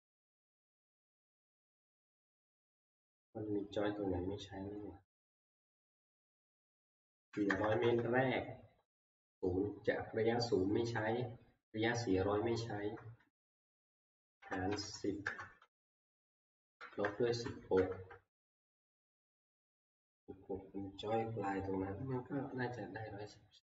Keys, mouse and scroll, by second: 7.1-7.5 typing, 14.1-17.8 typing.